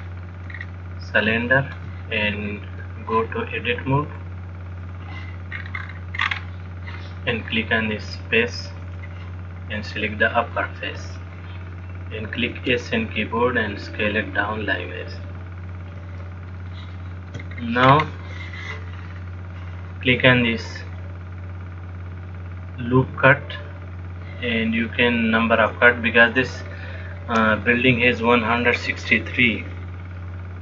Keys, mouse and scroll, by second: 0.1-0.8 scroll down 2, 0.8-1.5 scroll down 8, 1.6 shift+middle click, 4.3 click, 5.8-6.5 scroll down 4, 6.1-7.3 scroll up 10, 9.1 click, 10.1 click, 12.8 s, 16.9 shift+middle click, 17.7-18.1 scroll down 3, 18.1-18.9 scroll up 1, 18.9-19.6 scroll up 2, 23.8 click, 28.8 click.